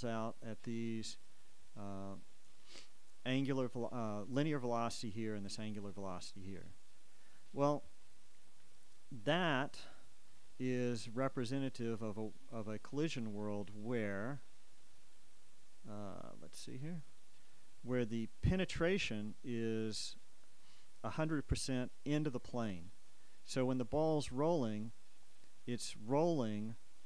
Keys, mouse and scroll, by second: 1.1 click, 10.1 click, 13.5-15.5 drag, 16.8 click.